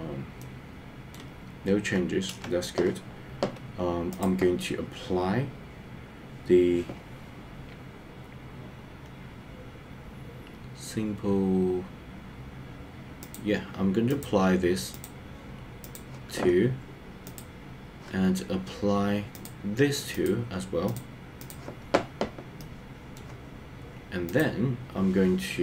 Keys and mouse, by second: 0.4 middle click, 2.2 KP_0, 13.4 click, 15.0-16.0 drag, 19.5 click, 21.0 click, 22.6 middle click.